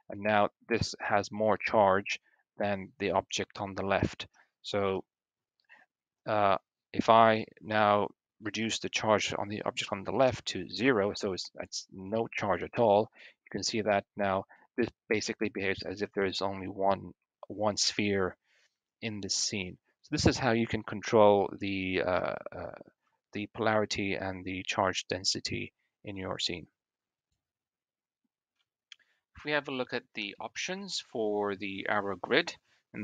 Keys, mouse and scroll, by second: 3.9 click, 4.6 click, 6.3-10.6 drag, 12.5 click, 13.5 Tab, 21.4-22.3 middle drag, 23.2 shift+middle click, 29.2 middle click, 30.0 middle click, 30.5 shift+middle drag.